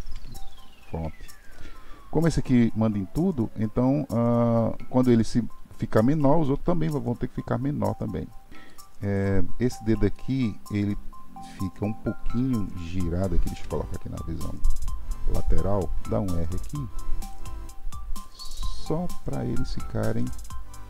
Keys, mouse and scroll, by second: 0.0 KP_1, 8.5-9.1 middle drag, 9.1 click, 10.1-13.2 middle drag, 13.5 KP_3, 16.1 r, 18.2-18.8 drag, 18.8 r.